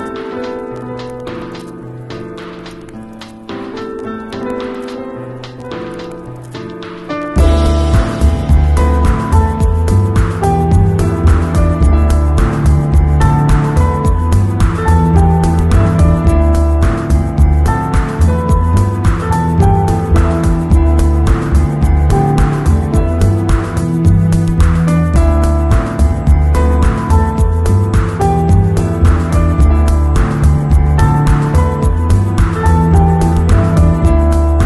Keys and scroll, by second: 6.8 b, 10.0 ], 12.0 [, 13.1 ], 13.7 [, 14.4 ], 16.2 ], 18.0 3, 20.8 0, 22.0 v, 32.5 super+i, 33.9 b.